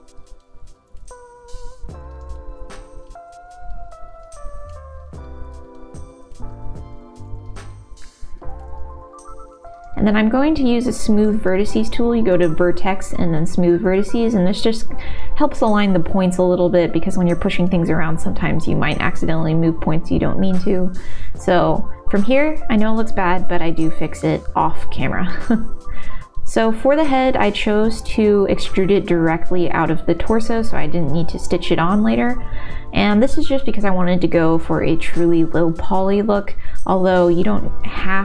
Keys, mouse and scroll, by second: 0.1 shift+z, 0.3 middle click, 1.0 alt+s, 1.5 ctrl+z, 2.1 g, 4.7 click, 5.1 middle click, 6.6 ctrl+z, 6.6 g, 9.1 shift+z, 10.3 shift+z, 10.5 shift+z, 11.4-12.6 drag, 13.8 middle click, 15.2-21.6 drag, 22.7 Tab, 23.5 Tab, 24.2 middle click, 25.1 e, 26.1 s, 28.3 g, 29.0 click, 29.1 middle click, 30.4 middle click, 31.1 g, 32.3 g, 33.4 middle click, 34.2 g, 35.2-36.4 middle drag, 36.7 g, 37.3 middle click.